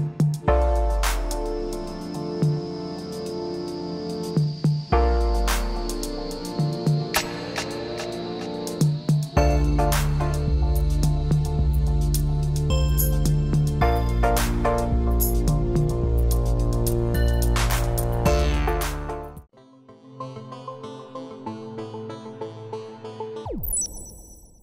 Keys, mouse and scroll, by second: 0.1 click, 0.3 click, 0.5 click, 0.9 click, 1.8 scroll down 1, 2.0 click, 2.2 click, 8.2 click, 8.6 click, 9.2 click, 9.9 scroll down 1, 10.0 click, 10.6 click, 11.3 click, 11.8 click, 12.1 click, 12.3 scroll down 2, 12.7 click, 13.2 click, 13.4 scroll up 2, 13.8 click, 14.0 click.